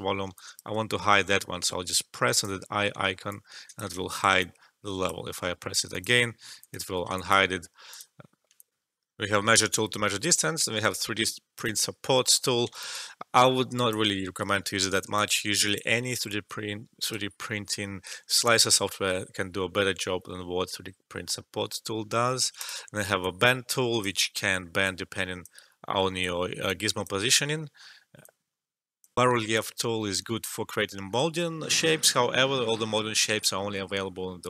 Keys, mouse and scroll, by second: 3.2 alt+click, 3.9 alt+shift+middle click, 4.3-5.8 drag, 7.1 alt+click, 8.5 alt+click, 8.7 alt+F12, 11.5 click, 12.8-14.5 alt+drag, 14.5 alt+middle click, 14.9 alt+right click, 15.2 alt+click, 16.1 alt+middle click, 16.4-18.7 alt+right drag, 18.7 alt+middle click, 22.5 click, 23.2-24.8 alt+drag, 24.8-29.1 drag, 29.1 alt+F12.